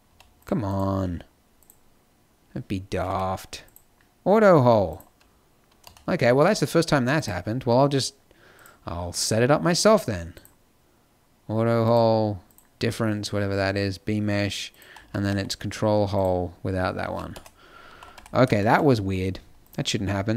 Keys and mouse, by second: 0.0 z, 3.0 t, 5.9 middle click, 6.3-10.3 drag, 16.9 z, 17.8 a, 18.0 t.